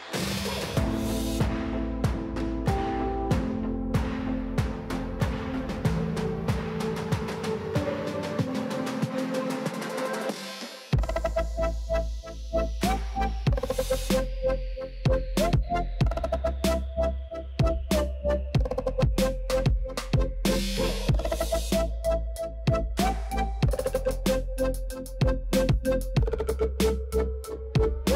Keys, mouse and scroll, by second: 1.7 ctrl+z, 2.4 click, 3.4-4.8 scroll down 10, 5.4-5.8 scroll up 10, 5.8 click, 6.4 click, 7.7 click, 8.3 scroll up 10, 8.5 click, 9.4 click, 11.4 click, 11.8-14.9 middle drag, 14.9-16.8 drag, 19.7-21.2 middle drag, 21.2 click, 24.9 click, 25.4-27.0 middle drag, 27.7 scroll up 1, 27.9 middle click.